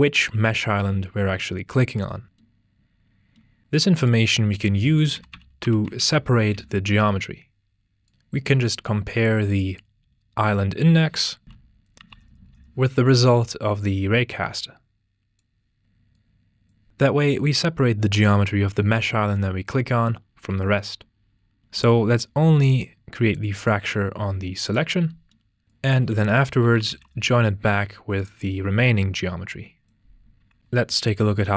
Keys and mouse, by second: 4.0 drag, 8.0 click, 8.8-9.9 drag, 13.4 click, 14.2 drag, 16.6 click, 16.8 g, 16.9-17.4 drag, 17.8-18.3 drag, 19.1 click, 19.8 click, 22.1 drag, 25.6 click, 25.6 x, 27.5 click, 28.1 click, 29.5 drag, 30.6 g, 31.1-31.5 drag.